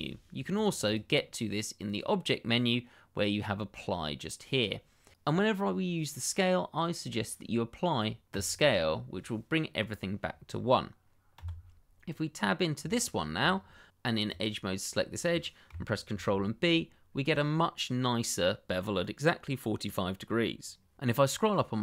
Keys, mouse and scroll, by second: 0.5 click, 0.9 double click, 1.8 click, 8.3 click, 11.3 Tab, 12.9 shift+middle click, 13.5-14.2 scroll up 1, 14.2 click, 15.4 middle click, 16.0 ctrl+b, 21.2-21.8 scroll up 1.